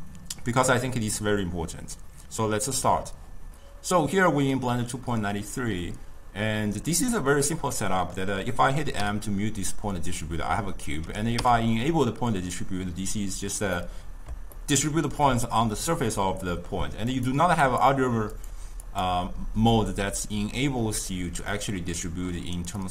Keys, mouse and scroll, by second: 0.6 g, 2.7 click, 3.1 ctrl+middle click, 7.9 click, 9.1 m, 11.5 m, 13.9-17.2 middle drag, 17.2-21.2 drag, 21.2-22.9 middle drag.